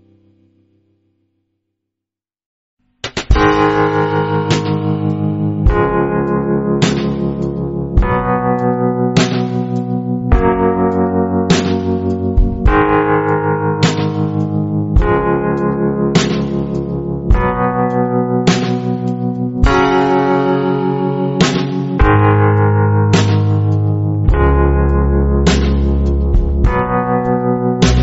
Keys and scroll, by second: 3.0-4.5 typing, 14.4 a, 22.9 a, 25.0 v, 25.7 space, 27.0-27.4 typing.